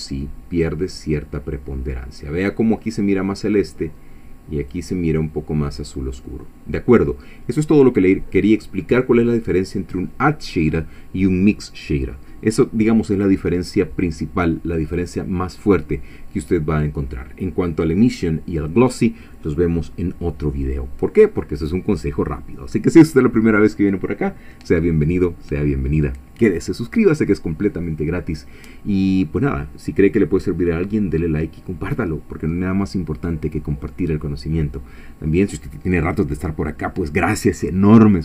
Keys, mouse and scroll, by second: 4.7-6.0 drag.